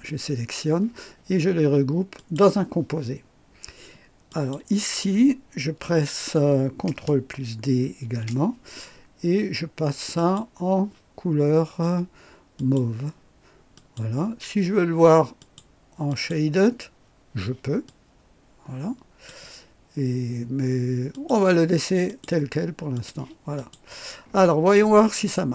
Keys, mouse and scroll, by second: 2.1 click, 4.2 click, 8.0 ctrl+d, 10.1 click, 12.5 click, 13.7 click, 15.4 click, 16.1 click, 17.8-19.4 drag, 21.1 click, 22.0 click, 22.9 click, 23.5 click, 24.2 scroll down 1, 25.2-25.5 right drag.